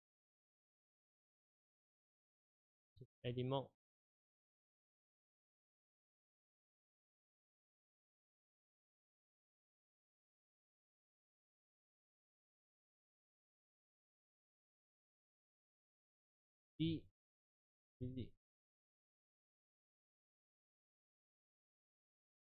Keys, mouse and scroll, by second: 3.1 Tab, 6.0 a, 6.3 s, 9.1 click, 9.9 g, 11.9 s, 15.5 Tab, 16.8 shift+d, 21.5 s.